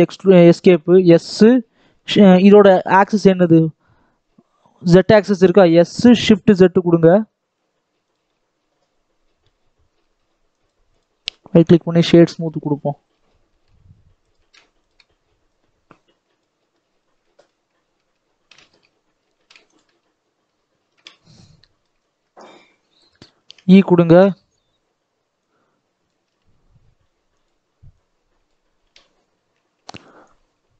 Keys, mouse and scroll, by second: 5.5 s, 8.2-9.9 middle drag, 9.9 Tab, 10.9 right click, 11.1-11.5 scroll down 3, 11.5 Tab, 11.9 middle click, 12.5-13.4 scroll up 4, 13.4 alt+a, 14.2 click, 14.3 alt+a, 16.6-17.1 scroll down 4, 17.1 shift+middle click, 17.9 Tab, 18.4 alt+a, 18.6 Tab, 19.2 alt+a, 19.6 alt+click, 20.1-20.9 scroll down 1, 20.9 KP_7, 21.5 right click, 21.5 shift+middle click, 21.9-23.3 scroll up 5, 22.1 right click, 22.1 shift+middle click, 23.3 e, 25.4 click, 26.1 s, 27.9 click, 28.7 e, 30.2 click.